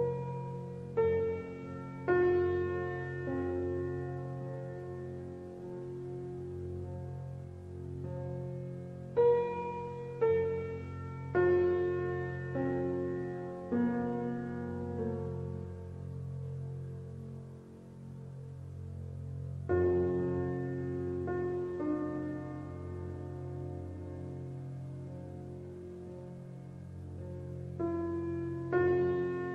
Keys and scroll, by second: 22.0 Return, 22.3 KP_6, 22.9 Return, 23.1 KP_7, 24.0 Return, 24.2 KP_8.